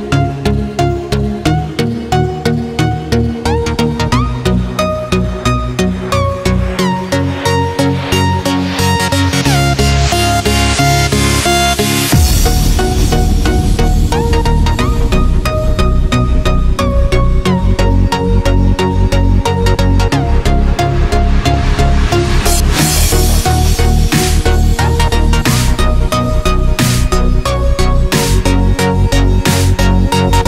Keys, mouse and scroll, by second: 0.3 click, 1.3-2.4 scroll down 1, 2.8 click, 3.4 click, 5.1 click, 6.9 click, 11.3 Return, 15.0 click, 17.3 Return, 21.5 click, 23.7 Return, 25.6 click, 28.8 ctrl+s, 30.1 click.